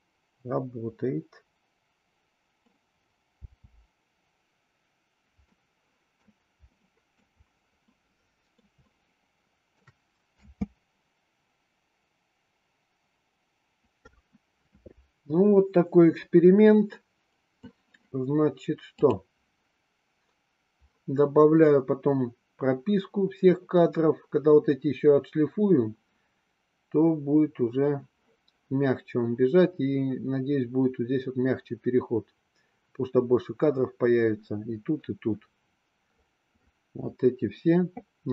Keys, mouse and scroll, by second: 0.4-1.8 middle drag, 2.0-2.7 middle drag, 3.4 space, 5.4-6.2 middle drag, 6.8-7.2 middle drag, 7.8 middle click, 9.0-10.0 shift+middle drag, 10.3 space, 18.9 click.